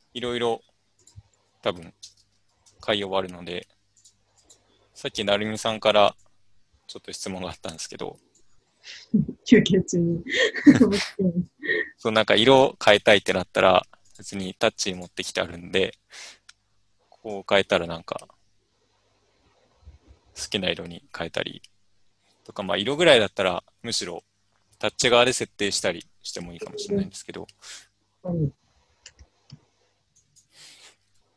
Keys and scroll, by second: 1.8-3.2 typing, 31.1 BackSpace.